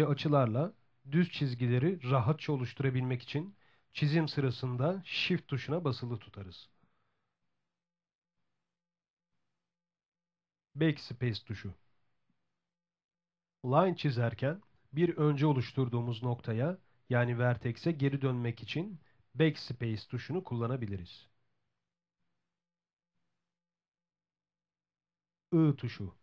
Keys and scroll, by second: 9.9 BackSpace, 26.0 i.